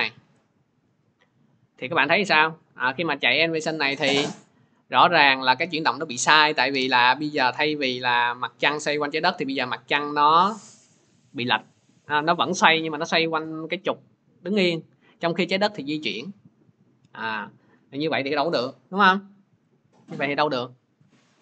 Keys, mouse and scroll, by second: 1.3 click, 3.1 click, 16.0 click.